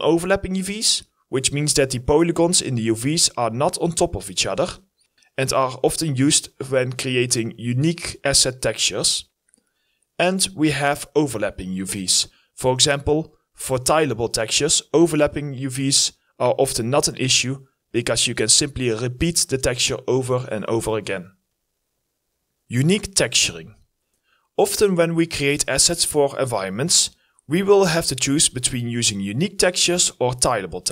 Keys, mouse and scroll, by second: 8.9-9.7 scroll up 3, 9.2 alt+middle click, 10.3 alt+middle click, 10.5-10.9 scroll up 2, 10.7 alt+middle click, 11.9 w, 12.0 scroll down 1, 12.4 alt+click, 12.6-13.0 scroll up 1, 13.4 alt+middle click, 13.5 alt+click, 13.7 alt+middle click, 14.3 alt+middle click, 14.5 scroll up 1, 14.6 alt+click, 14.8 alt+middle click, 15.6 right click, 16.5 alt+middle click, 17.1 alt+middle click, 17.2 scroll down 1, 17.5 alt+middle click, 17.9-18.4 scroll up 2, 18.0 alt+middle click, 18.4 scroll down 1, 18.6 alt+middle click, 18.8-19.5 scroll up 1, 19.6 alt+middle click, 20.6 alt+middle click, 21.1 scroll down 1, 24.1 double click, 24.6 alt+click, 25.0 alt+right click, 25.1 ctrl+z, 25.7 alt+right click, 26.9 alt+middle click, 28.8 alt+right click, 28.9 alt+click, 30.7 alt+right click, 30.7 click.